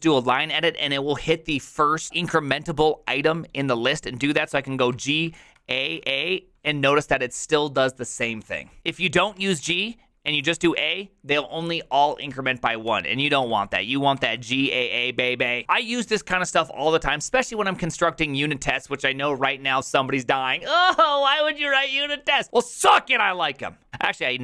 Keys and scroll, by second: 4.9 g, 5.5 ctrl+a, 5.9 ctrl+a, 8.5-10.8 typing, 10.4 ctrl+a, 10.6 ctrl+a, 12.8-14.1 typing, 14.3 ctrl+a.